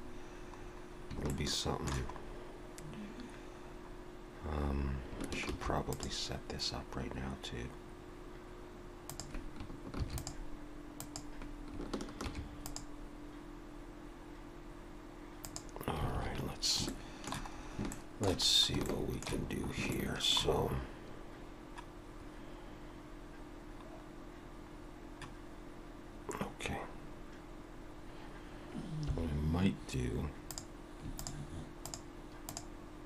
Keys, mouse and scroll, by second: 0.0-0.9 scroll down 2, 1.3 shift+middle click, 2.2 scroll up 2, 3.5-4.3 scroll down 2, 10.0 ctrl+r, 12.2 ctrl+r, 16.1 alt+a, 16.4-16.7 scroll down 4, 16.9 shift+middle click, 17.6 scroll up 2, 17.9 shift+middle click, 18.5 scroll up 2, 18.9 shift+middle click, 19.5 scroll up 1, 19.9 shift+middle click, 20.6 scroll up 2, 21.4-22.4 scroll down 1, 23.2-23.6 scroll down 1, 24.7-26.2 scroll down 1, 30.5 click, 31.2 shift+click.